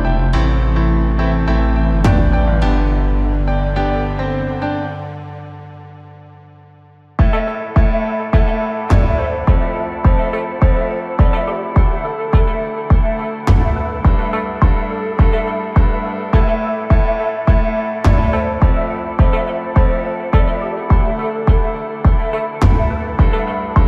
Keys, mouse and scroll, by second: 1.2-4.2 drag, 14.2-17.3 drag, 19.0-19.6 scroll up 1, 19.6 KP_1, 20.3-21.3 scroll up 2, 21.3-23.8 drag.